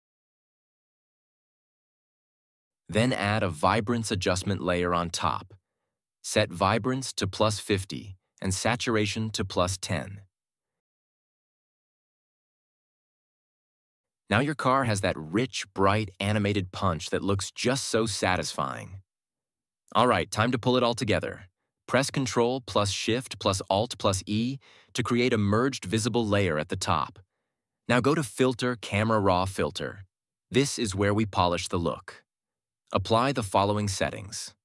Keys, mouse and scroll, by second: 1.0 click, 6.3-7.3 typing, 8.6 click, 9.3 Left, 9.4 1, 9.7 Return, 11.7 click, 22.6 ctrl+alt+shift+e, 27.3 click.